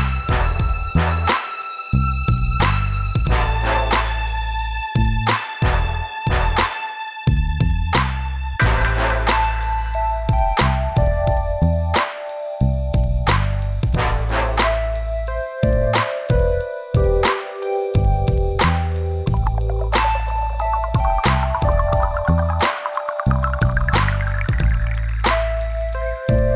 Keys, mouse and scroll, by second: 1.6 click, 2.5 click, 4.6 click, 5.1 click, 5.2 double click, 5.7 double click, 7.9 click, 8.0 click, 8.8 click, 10.9 click, 13.3 click, 15.3 click, 15.4 click, 16.1 click, 17.1 click, 22.5 scroll up 2, 23.2 click, 23.7 click, 23.8 double click, 23.9 double click, 24.3 scroll down 1, 25.2 p.